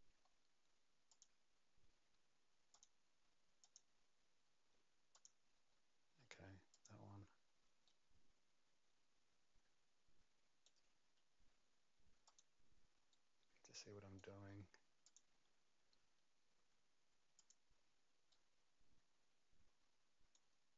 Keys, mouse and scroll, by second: 0.2-1.1 scroll down 1, 1.1 click, 1.1-2.7 scroll down 2, 2.7 click, 3.6 click, 5.1 click, 6.7 click, 7.8 right click, 11.2 scroll up 2, 12.2 click, 12.2 scroll up 1, 13.1 right click, 15.0 click, 17.3 click, 18.3 right click.